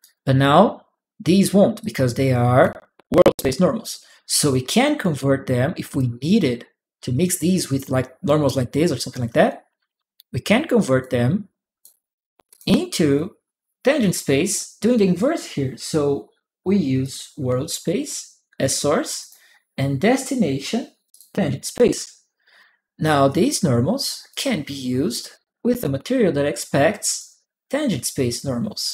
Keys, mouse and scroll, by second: 1.6 click, 4.4-5.7 drag, 10.8 click, 12.2 click, 13.8 click, 16.8 click, 19.0 click, 20.9 click, 22.4 click, 24.1-25.1 drag, 27.0-28.6 drag, 27.0-28.6 right drag.